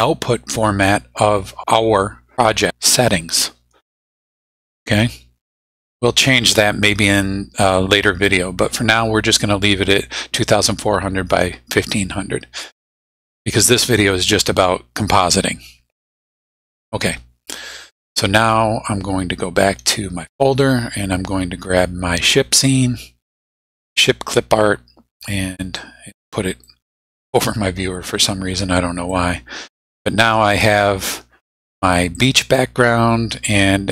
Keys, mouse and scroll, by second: 19.6 click, 20.6 click, 22.3-24.2 drag, 25.8 click, 27.1 click, 29.1-30.5 drag, 32.2 click.